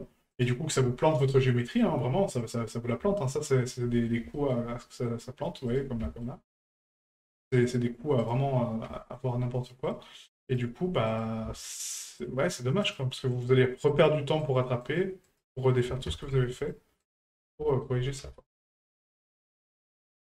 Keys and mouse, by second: 1.1 shift+middle click, 1.6 right click, 2.7 middle click, 3.5 shift+middle click, 3.9 middle drag, 4.3 shift+middle drag, 4.9 middle drag, 5.7 right click, 6.0 shift+middle drag, 7.7 right click, 8.2 right click, 10.5 right click, 11.1 right click, 12.8 right click, 13.3 right click, 13.9 right click, 14.4 right click, 14.8 right click, 15.2 right click, 16.6 right click, 17.0 right click, 17.4 right click, 17.7 shift+middle click.